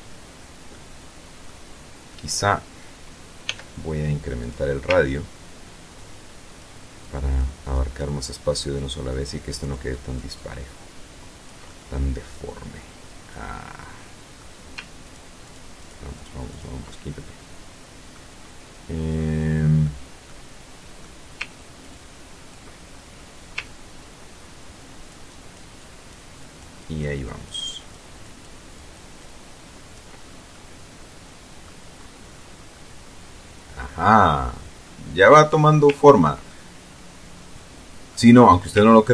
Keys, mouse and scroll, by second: 0.0 middle click, 1.4 middle click, 2.7 f, 3.6 click, 4.3-6.0 ctrl+drag, 6.2 ctrl+click, 6.9-10.8 ctrl+drag, 10.8-13.8 ctrl+middle drag, 14.2 ctrl+click, 14.6 ctrl+click, 15.2 ctrl+click, 15.4 ctrl+click, 15.7 ctrl+click, 16.1-17.5 ctrl+middle drag, 17.5-18.4 scroll up 2, 18.4 middle click, 19.4 middle click, 20.7-21.8 ctrl+drag, 22.8-24.9 ctrl+drag, 25.0 ctrl+click, 25.5 ctrl+click, 26.5 ctrl+click, 27.0 ctrl+click, 27.4 ctrl+click, 28.0-29.3 ctrl+drag, 29.7-31.1 middle drag, 31.1-31.8 scroll down 2, 31.8 scroll up 2, 31.9-32.3 scroll down 2, 33.0-34.5 scroll down 6, 34.5-35.0 scroll up 2, 35.7-37.4 ctrl+middle drag, 38.0-39.1 ctrl+drag.